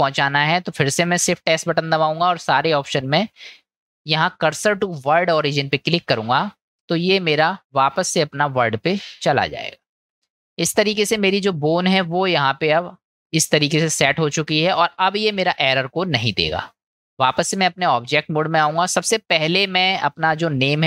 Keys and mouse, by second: 1.5 shift+s, 7.8 middle click, 11.0 middle click, 16.7-17.6 drag, 18.9-19.5 middle drag.